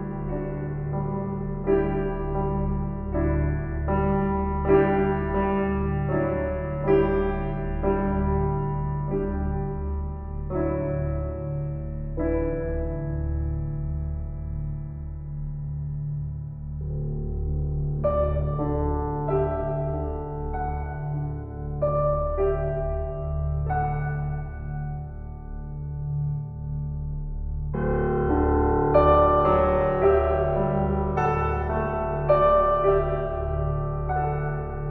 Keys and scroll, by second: 15.9 F4.